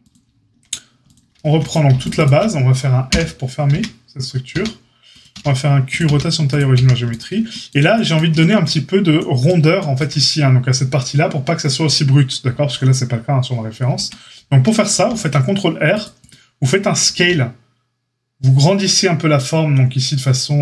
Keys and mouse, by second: 1.9 alt+shift+click, 2.1 alt+shift+click, 3.0 f, 3.7 Tab, 4.5 a, 5.3 q, 6.0 q, 6.7 a, 13.9 Tab, 14.8 ctrl+r, 17.1 s.